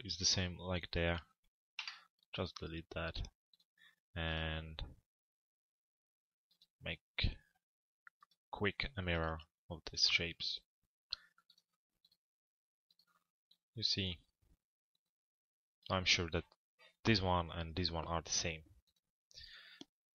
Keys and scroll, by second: 1.3 Delete, 20.0 p.